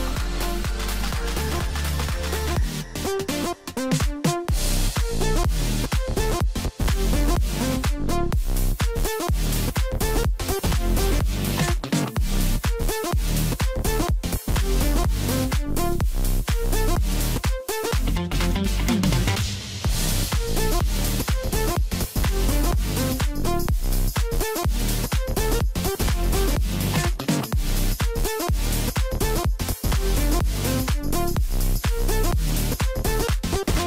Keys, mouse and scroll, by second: 1.0-2.2 middle drag, 2.2 click, 2.5 scroll down 2, 2.7-4.0 middle drag, 4.0 click, 5.0 KP_Divide, 6.0 KP_1, 6.6-7.4 scroll up 2, 7.4 g, 11.7 KP_7, 13.3 s, 14.9 scroll down 3, 15.0-16.1 middle drag, 16.1 KP_1, 17.3-19.2 drag, 19.2 scroll down 1, 19.5-20.5 middle drag, 20.5 click, 22.2-23.9 drag, 23.9-25.0 scroll up 1, 25.0 KP_Divide, 25.4 KP_1, 26.2 scroll down 1, 26.6 Tab, 28.1 ctrl+r, 30.3 Tab, 31.0 s, 32.6 Tab.